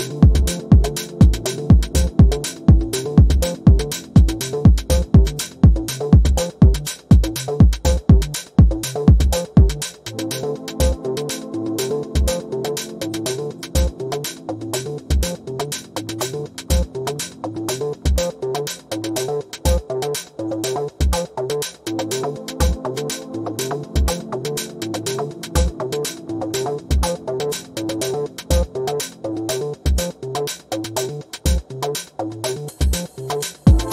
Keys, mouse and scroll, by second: 4.9 v, 6.7 click, 13.5 Return, 15.5 click, 25.1-26.0 typing, 27.0 click, 27.6-27.9 ctrl+scroll up 1, 28.5 click, 28.9 ctrl+scroll up 1.